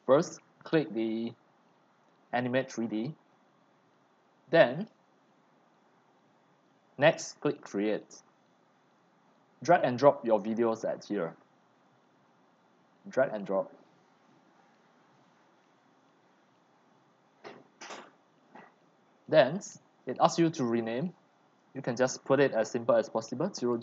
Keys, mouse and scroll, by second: 2.9-12.0 drag, 12.0-14.3 right drag, 21.4 click, 21.9 middle click, 23.5-23.8 typing.